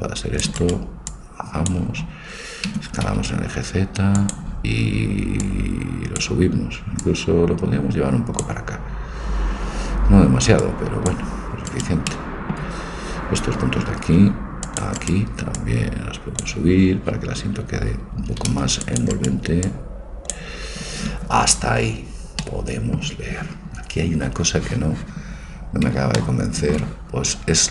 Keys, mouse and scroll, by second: 1.2-2.9 drag, 2.9 s, 5.5 right click, 6.3-8.9 drag, 10.7-12.1 drag, 11.8 right click, 12.1 click, 13.8 a, 14.3 c, 15.6-17.5 drag, 18.3 a, 18.5 c, 19.7-21.7 right drag, 22.5-24.7 middle drag, 25.3-26.8 middle drag.